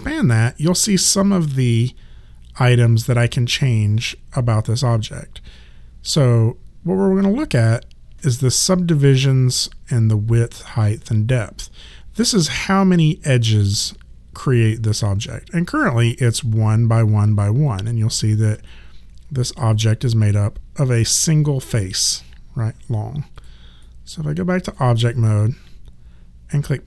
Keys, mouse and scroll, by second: 17.7 alt+click, 18.7 right click, 20.3 click, 23.4 click, 23.8 right click, 25.3 click.